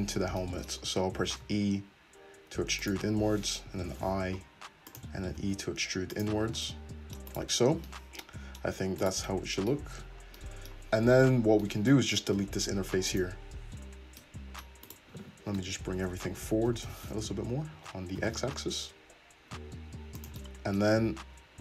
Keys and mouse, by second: 1.2-6.7 drag, 1.2 e, 3.7 i, 5.3 e, 6.2 i, 6.5 Tab, 6.7 middle click, 7.3 click, 7.9-14.9 middle drag, 9.9 Tab, 12.4 x, 14.9 right click, 14.9 middle click, 15.6 Tab, 16.7 g, 20.4-21.6 middle drag, 21.0 Tab.